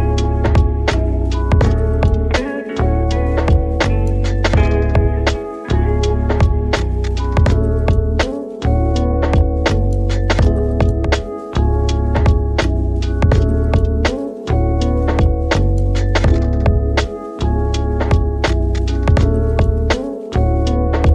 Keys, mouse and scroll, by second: 0.2 ctrl+z, 0.8 shift+a, 2.5 click, 3.8-6.9 drag, 5.7 1, 6.9-7.5 scroll up 5, 7.5-10.3 middle drag, 10.3-13.3 drag, 13.4-13.8 scroll down 3, 13.8 middle click, 14.4 r, 15.9 g, 17.4 click, 17.5 KP_1, 18.0 scroll up 2, 18.3 shift+middle click, 18.8 g, 19.2 click, 19.3 s, 19.7 click, 20.0 g, 20.8 click.